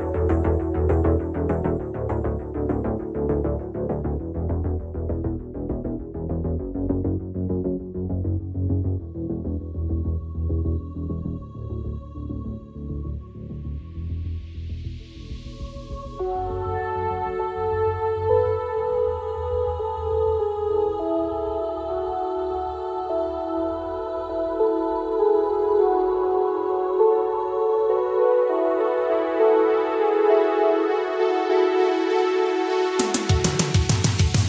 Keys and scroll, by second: 12.3 ctrl+z, 31.8 ctrl+z.